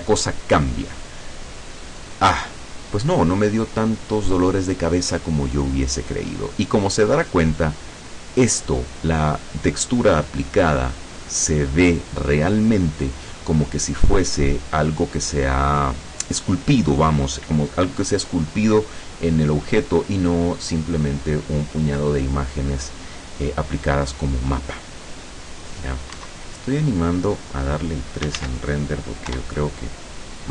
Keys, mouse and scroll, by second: 26.3 Escape, 27.5 click, 28.5 ctrl+s, 28.7 ctrl+click, 29.4 F12.